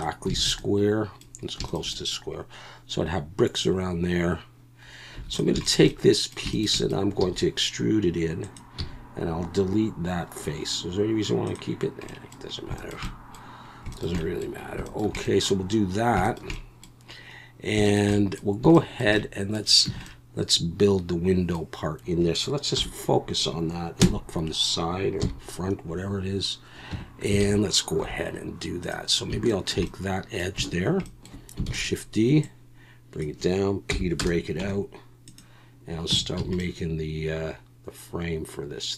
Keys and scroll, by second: 0.4 alt+a, 5.1 3, 7.2 e, 8.8 x, 19.9 Tab, 22.8 /, 24.0 KP_3, 25.2 KP_1, 26.9 Tab, 27.4 alt+a, 28.0 2, 31.7 shift+d, 33.9 p, 34.6 Tab, 36.1 Tab, 36.4 a.